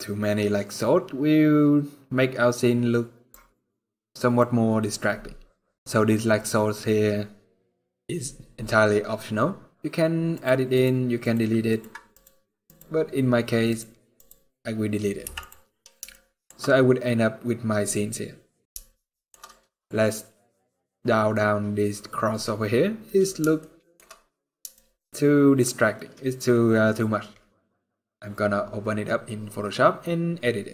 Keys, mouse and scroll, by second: 4.1 click, 7.8-8.4 scroll up 2, 10.1 click, 10.6 click, 11.5 click, 11.9 click, 13.4 click, 13.9 click, 14.9 x, 15.8 shift+middle click, 16.3 scroll up 2, 17.6 click, 18.3 scroll down 2, 18.7 shift+middle click, 19.1 scroll up 5, 20.9-21.9 scroll up 2, 22.4-22.8 scroll down 7, 23.3 shift+middle click, 23.3 scroll down 3, 23.8 scroll up 3, 24.5 shift+middle click.